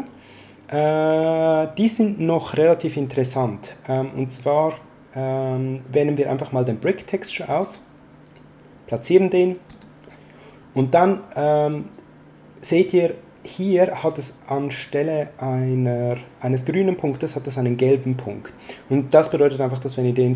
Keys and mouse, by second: 7.4 click, 9.6 click, 19.2 click.